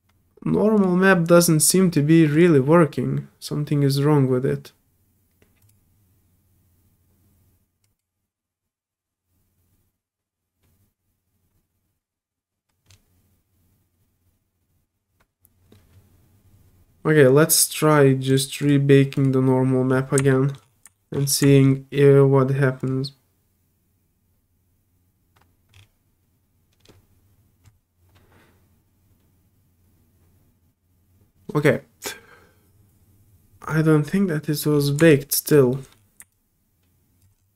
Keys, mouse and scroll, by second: 0.8 click, 2.3 click, 5.6 click, 7.8 click, 18.3 click, 18.6 click, 19.1 click, 20.1 middle click, 20.3 middle click, 20.9 alt+middle click, 21.1 alt+middle click, 21.4 alt+middle click, 21.5 alt+middle click, 22.8 alt+click, 26.9 middle click, 33.6 click, 34.5 middle click, 34.5 scroll down 2, 34.7 middle click, 34.7 scroll up 4, 34.8 middle click, 35.1 alt+click, 35.7 alt+middle click, 36.3 alt+click, 37.4 alt+middle click, 37.4 scroll down 2.